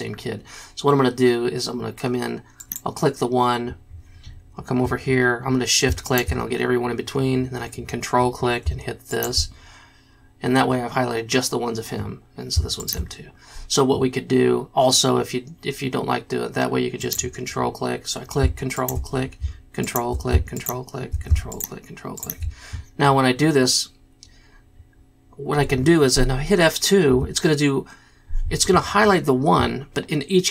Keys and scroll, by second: 27.3 F2.